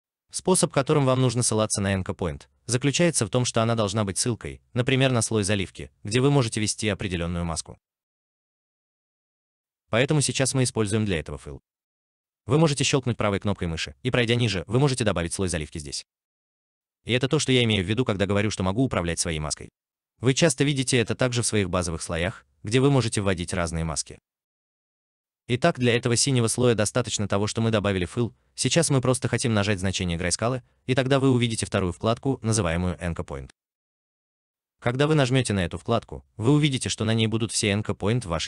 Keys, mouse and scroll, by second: 12.4 right click, 18.4-19.1 scroll up 1.